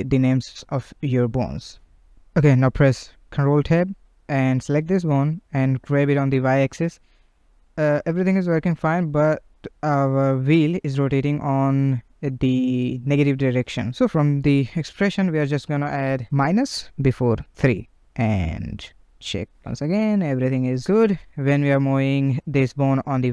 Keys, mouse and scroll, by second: 1.8 click, 2.9 ctrl+Tab, 3.3 click, 4.6 g, 8.3 click, 8.9 ctrl+Tab, 9.1 click, 10.1 click, 11.3-14.5 right drag, 17.9 click, 18.4 click, 19.7 g.